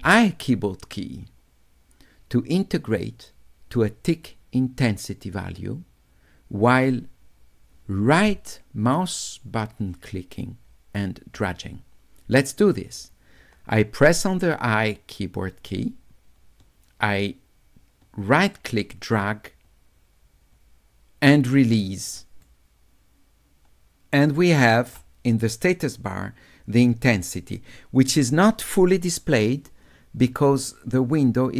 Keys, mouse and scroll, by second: 15.8 d, 17.2-22.0 drag, 22.0 right click.